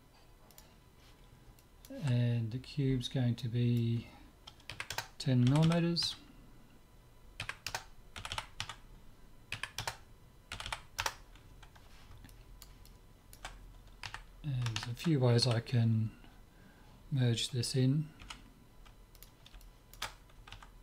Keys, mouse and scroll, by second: 1.6-3.6 middle drag, 3.6-5.4 drag, 5.6 m, 8.3 m, 10.6 m, 12.3-14.9 middle drag, 14.0 KP_3, 15.5 z, 16.0-18.3 middle drag, 18.2 g, 19.6-20.8 middle drag.